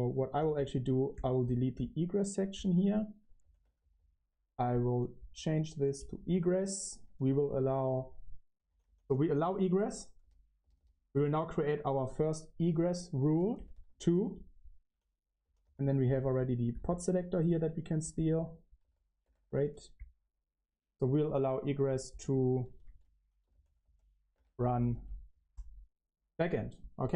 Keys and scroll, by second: 0.0-16.2 typing, 12.6 Escape, 17.3-20.1 typing, 22.5-26.6 typing, 24.2 Escape.